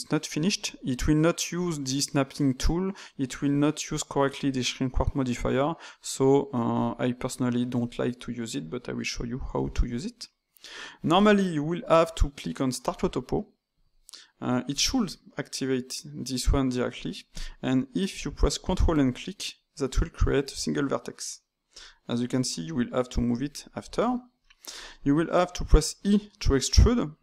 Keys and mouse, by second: 6.7-9.3 drag, 9.3-12.7 ctrl+shift+middle drag, 12.7-17.7 drag, 18.8 ctrl+click, 19.5-21.7 middle drag, 21.7 g, 23.5-25.7 middle drag, 25.7 e.